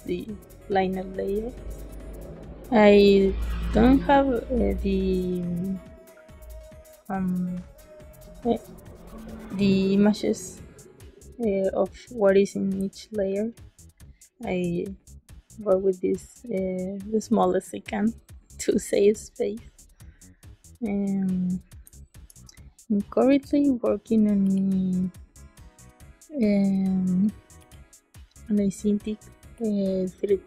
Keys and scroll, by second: 12.7 space, 21.8 space.